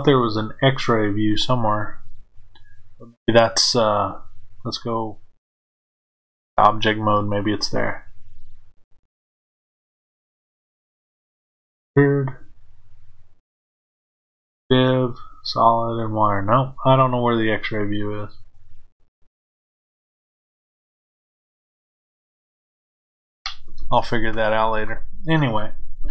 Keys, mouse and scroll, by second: 3.1 click, 6.0-21.4 drag.